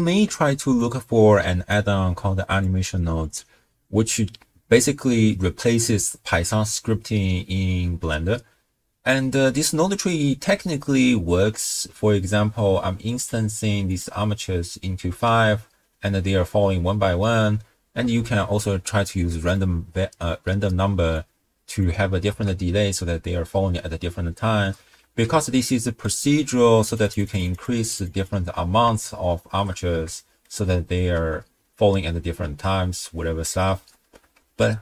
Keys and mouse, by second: 0.9 click, 2.6 click, 13.2 click, 13.9 click, 15.3 space, 17.5 space, 18.2 shift+space, 19.5 click, 21.1 drag, 21.4 click, 22.3 shift+space, 24.6 space, 25.1 shift+space, 25.8 middle click, 26.9 click, 27.9 click, 29.0-29.7 shift+middle drag, 30.2-30.5 shift+middle drag, 30.9 space, 33.8 space, 34.4 shift+space.